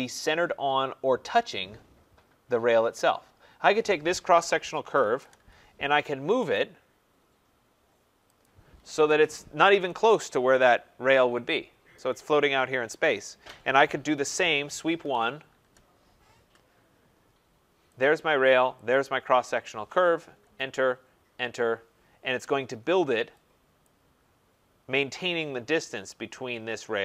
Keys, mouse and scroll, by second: 4.5-5.5 typing, 6.5 click, 8.4 click, 9.0 Escape, 9.1 Escape, 9.5 middle click, 9.5 middle click, 11.9 right click, 14.7-15.6 typing, 18.0 click, 18.9 click, 20.4 Return, 21.2 Return, 23.8 click.